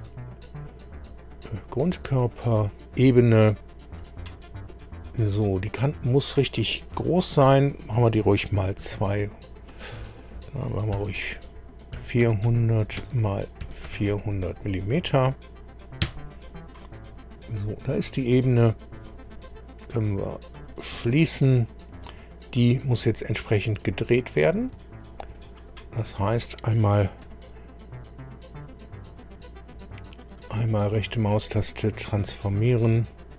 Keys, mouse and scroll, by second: 1.5 click, 5.7 click, 8.8 2, 10.9 BackSpace, 11.9 4, 12.2 KP_0, 12.5 KP_0, 13.0 Tab, 13.6 KP_4, 13.9 KP_0, 14.1 KP_0, 16.0 KP_Enter, 17.3 scroll down 2, 20.5 click, 21.5 scroll down 1, 22.0 click, 23.5-24.5 middle drag, 24.8 shift+middle click, 27.2 right click, 29.1 click, 30.4 right click, 31.7 click, 32.6 middle click.